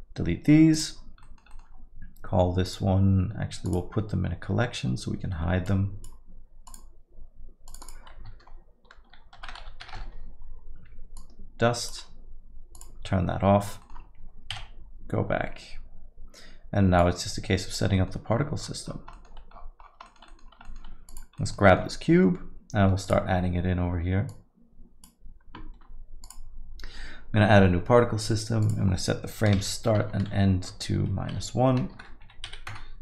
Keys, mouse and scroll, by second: 0.7 click, 1.2 middle click, 1.5 alt+middle click, 2.7 click, 3.6 click, 5.7 click, 11.2 click, 13.8 middle click, 14.6 KP_Divide, 17.0 click, 18.3-20.0 scroll down 20, 19.1 middle click, 20.1 middle click, 20.4 scroll down 2, 20.7 middle click, 21.7 middle click.